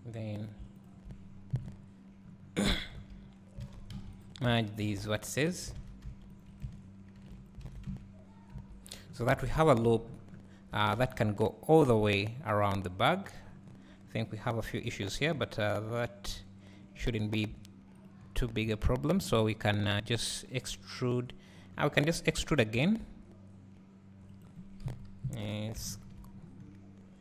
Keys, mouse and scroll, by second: 0.5 click, 0.9 shift+click, 1.6 KP_Decimal, 2.3-2.7 scroll down 2, 2.7-3.1 scroll up 2, 3.7 alt+a, 4.1 c, 5.8 alt+a, 6.3 c, 7.7 alt+a, 9.2-9.6 scroll down 2, 9.6 ctrl+r, 10.1 click, 10.1 scroll down 2, 11.0 ctrl+r, 13.7 scroll up 1, 14.1-15.4 scroll down 1, 16.9 scroll up 1, 18.1 alt+click, 18.7 `, 19.5 scroll up 1, 21.6 scroll down 1, 22.3 e.